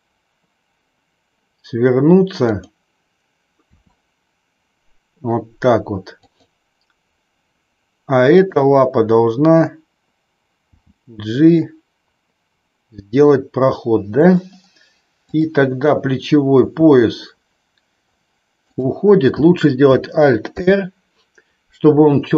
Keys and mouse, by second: 2.5 click, 3.6 r, 6.1 click, 8.4 click, 10.6 g, 14.2 click, 15.1 click, 16.6 r, 20.5 alt+r.